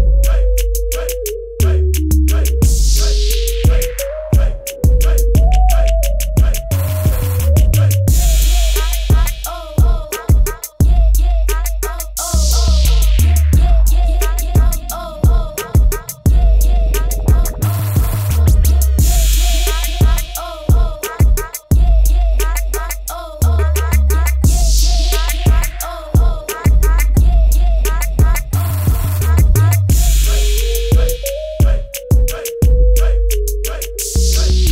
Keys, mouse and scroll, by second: 2.1-3.1 typing, 2.3 click, 3.3 click, 6.5 typing, 7.7-8.8 typing, 8.1 click, 10.0 click, 14.2 ctrl+KP_0, 14.7 scroll down 1, 15.9 click, 21.7-23.7 scroll down 1, 23.7 click.